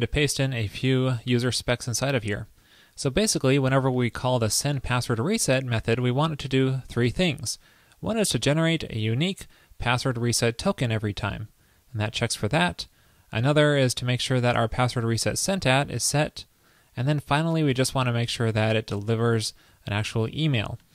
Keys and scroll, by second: 0.5 super+v.